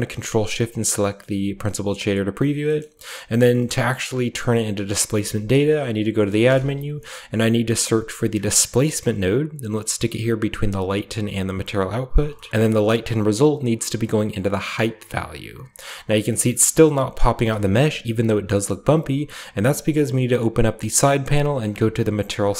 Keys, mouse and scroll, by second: 0.6 ctrl+shift+click, 2.7-5.0 scroll up 1, 2.7 middle click, 3.6 middle click, 4.0-5.3 middle drag, 5.1 shift+a, 5.6 click, 6.3 typing, 8.6 click, 11.2 click, 11.8 click, 12.4 scroll up 2, 13.3-14.6 drag, 16.5-19.5 scroll up 3, 16.8-17.5 middle drag, 17.6-19.5 shift+middle drag, 19.5 click, 21.4 click, 22.2-22.5 scroll down 3.